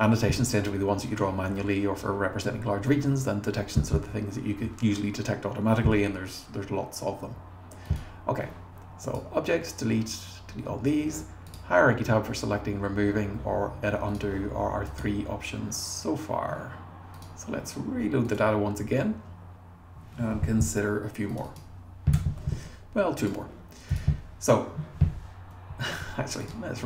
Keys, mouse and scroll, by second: 7.9 click, 14.1 click, 18.3 click, 21.3 click, 21.4 click, 22.1 BackSpace, 23.2 click, 23.9 click.